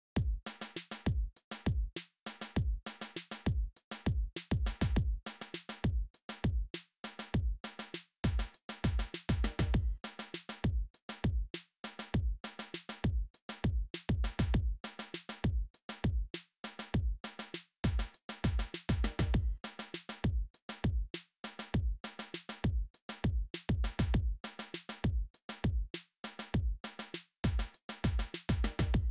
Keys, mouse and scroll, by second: 14.3 middle click.